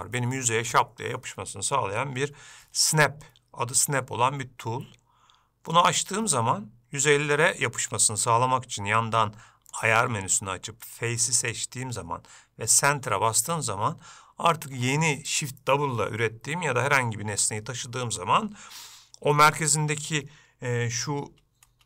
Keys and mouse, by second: 5.9 click, 10.0-13.6 drag.